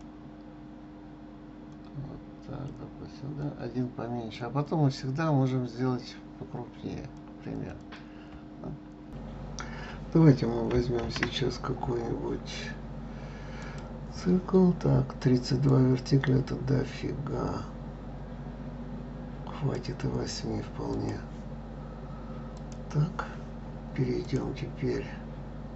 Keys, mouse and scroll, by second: 1.7 click, 3.4 click, 4.6 click, 7.5 click, 7.8 click, 8.6-9.1 scroll up 4, 11.0 shift+a, 15.7-18.6 drag, 20.9 click, 22.5 click, 24.2-25.7 drag.